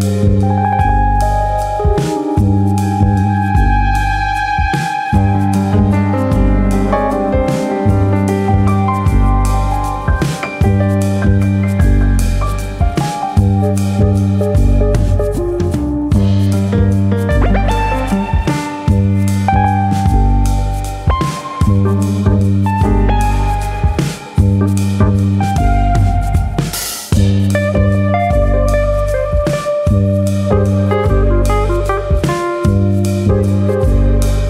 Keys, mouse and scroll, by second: 0.4 alt+click, 0.6 alt+click, 0.8 s, 1.6 click, 2.3 g, 3.1 click, 3.7 alt+click, 4.0 middle click, 4.8 g, 6.0 click, 6.6 alt+click, 6.8 middle click, 7.9 g, 9.6 click, 9.8 middle click, 10.2 scroll down 3, 10.4 middle click, 11.6 alt+click, 11.8 middle click, 12.4 click, 14.3 middle click, 15.4-16.7 scroll up 3, 15.7 middle click, 17.4-17.9 scroll up 1, 18.1 click, 18.6 shift+click, 19.3 KP_3, 20.4 click, 21.4 click, 21.9 shift+click, 22.2 shift+click, 23.9 alt+click, 24.5 click, 25.8 click, 26.1 alt+click, 26.3 shift+click, 27.3 click, 27.3 middle click, 27.7-28.2 scroll down 3, 28.0 middle click, 28.7 click, 29.3 click, 31.4 click, 32.8 click, 33.0 shift+middle click, 34.3 click, 34.3 shift+middle click.